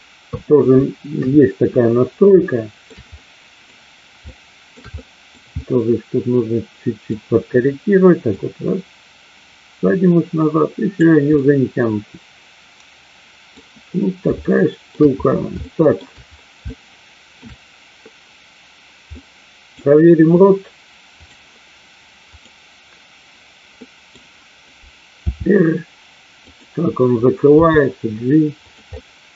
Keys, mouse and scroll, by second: 1.1 KP_3, 2.3-2.8 shift+middle drag, 3.1-3.6 middle drag, 4.2-4.7 shift+middle drag, 4.8-5.3 middle drag, 5.6-7.0 middle drag, 8.3-11.1 drag, 11.3-13.5 middle drag, 14.5-14.8 shift+middle drag, 15.6-16.0 shift+middle drag, 16.6-17.3 shift+middle drag, 19.1-19.6 middle drag, 21.2 click, 23.7 middle click, 25.3 r, 27.6 g, 29.0 middle click.